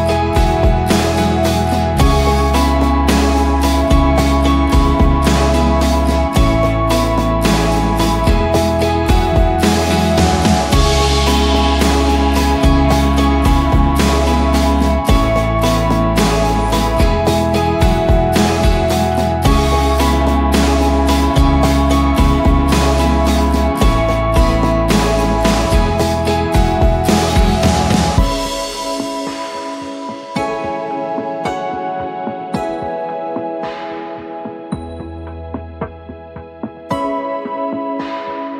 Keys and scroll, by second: 2.9 b, 6.3-6.9 typing, 8.3 ctrl+s, 8.7 ctrl+w, 10.1-11.3 typing, 13.6 Return, 15.4 Return, 17.0-17.7 typing, 18.0 ctrl+t, 22.0 Return, 22.8 ctrl+j, 23.1 v, 26.0 BackSpace, 26.1 Return, 27.1 ctrl+g, 27.9-28.8 typing, 32.5 Return, 37.5 BackSpace.